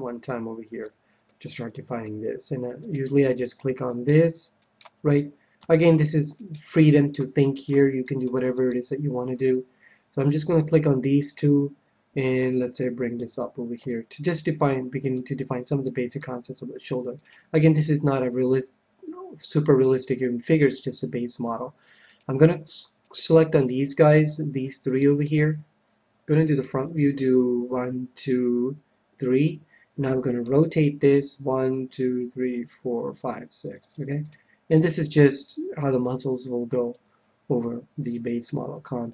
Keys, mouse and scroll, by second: 0.8 a, 1.3-2.9 middle drag, 4.6-6.6 right drag, 6.9-10.3 right drag, 9.5-11.2 middle drag, 11.2 KP_1, 12.4-14.2 drag, 13.7 a, 14.6-17.4 middle drag, 17.1-18.8 right drag, 22.0-24.8 right drag, 24.6-27.3 middle drag, 26.3 KP_1, 27.3-29.1 drag, 30.3 r, 33.8-35.4 drag, 34.2-36.0 middle drag, 37.0 KP_1, 38.1-39.1 middle drag, 39.0 a.